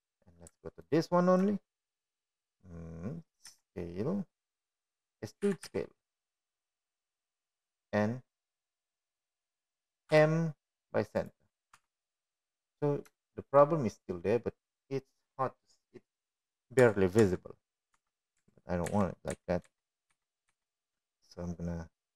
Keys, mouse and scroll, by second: 6.2 s, 8.2 e, 11.5 middle click, 12.9 m, 14.6 Tab, 16.0 shift+middle click, 19.7 Tab, 20.0 Tab, 21.2 ctrl+Tab, 21.7 ctrl+z.